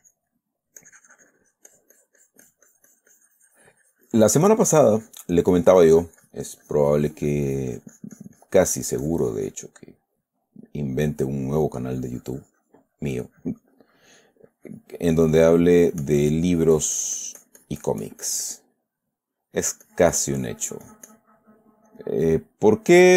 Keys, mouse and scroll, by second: 0.0 click, 0.7-5.7 middle drag, 1.2-5.7 drag, 5.9-10.1 drag, 5.9-10.7 middle drag, 10.9-12.1 middle drag, 12.2-19.1 drag, 19.2 middle click, 20.0-21.7 drag, 22.3 click, 22.6 middle click.